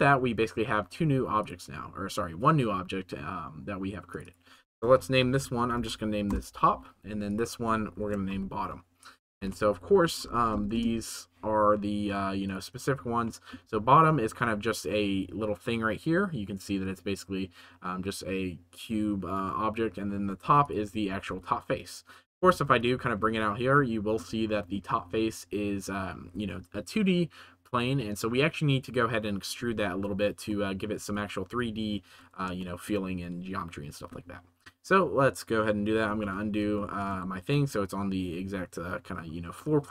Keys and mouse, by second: 0.7 Tab, 4.3-6.3 right drag, 7.2 right click, 7.4-10.7 shift+right drag, 9.4 BackSpace, 10.3 t, 13.3 middle click, 13.5 g, 21.0 g, 21.2 z, 22.2 g, 22.4 z, 22.7 middle click, 23.8-24.1 middle drag, 24.5 shift+middle click, 30.6 middle click, 30.9 z, 32.0 ctrl+s, 32.5 shift+middle click, 36.0 ctrl+z, 36.7-37.1 shift+middle drag, 37.4 ctrl+s.